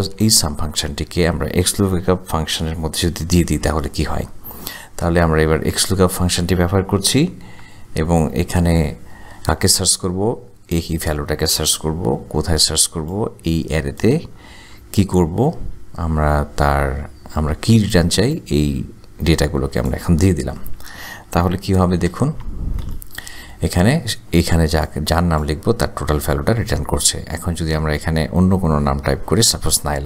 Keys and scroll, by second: 0.1 shift+9, 3.5 x, 5.0 l, 7.6 Tab, 12.4 ,, 14.9 ,, 21.9 shift+0, 22.2 shift+0, 22.8 Return.